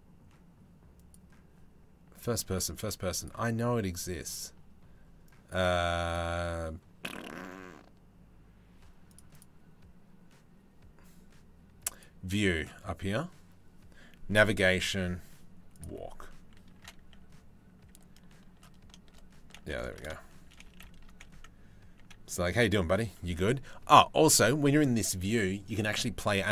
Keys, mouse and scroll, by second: 2.8-4.0 middle drag, 11.5-20.1 middle drag, 20.6-26.5 middle drag.